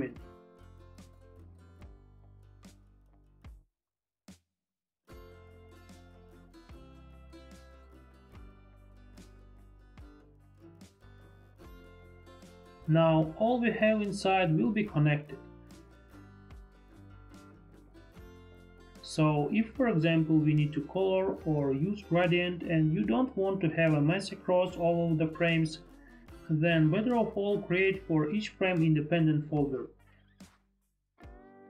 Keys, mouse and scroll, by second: 2.8 click, 4.5 click, 5.9 ctrl+BackSpace, 5.9 click, 7.6 click, 8.2 click, 10.2 F4, 11.7 F4, 11.7 click, 12.2 click, 13.9 click, 14.9 ctrl+z, 15.6 ctrl+z, 15.6 click, 17.2 ctrl+z, 20.9 click, 25.3 click, 27.6 click, 29.6 ctrl+g.